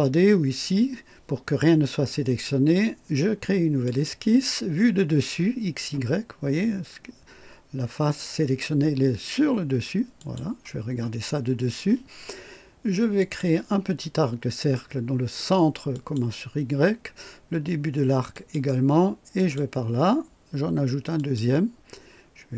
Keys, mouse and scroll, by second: 3.8 click, 10.2 click, 13.2 click, 15.9 click, 18.3 click, 19.4 click, 21.1 click.